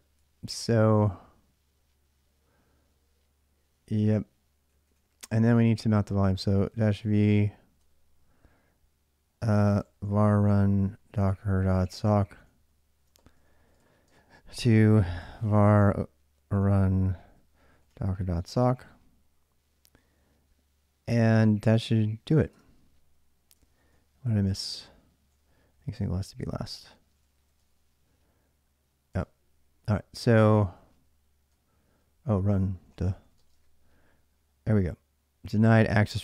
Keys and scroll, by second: 0.0-0.2 typing, 4.5 ctrl+a, 4.7 ctrl+a, 5.7-7.6 typing, 9.2-18.9 typing, 22.1-27.9 typing, 28.9 Return, 30.3-33.6 typing.